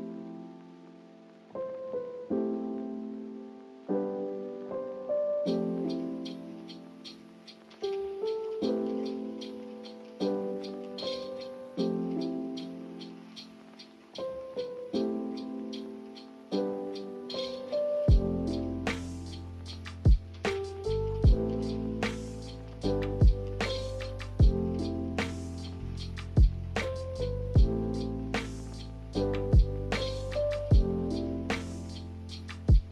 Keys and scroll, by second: 7.2 Delete.